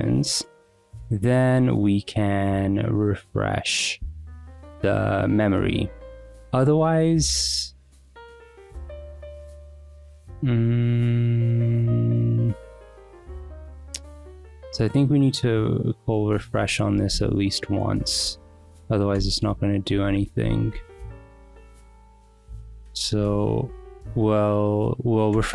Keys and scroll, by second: 0.0-4.1 typing, 0.4 Return, 0.8 Escape, 4.4 Return, 17.1 v, 18.2 Return, 19.6-24.5 typing, 22.4 Escape, 23.2 Return, 25.3 Return.